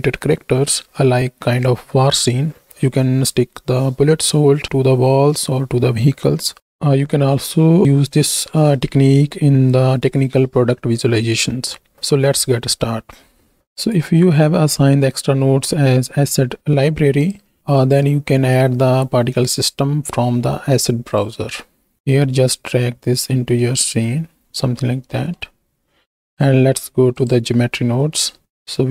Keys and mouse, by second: 17.7-21.2 drag, 24.5-25.4 middle drag, 26.2-27.5 drag, 28.4 middle click.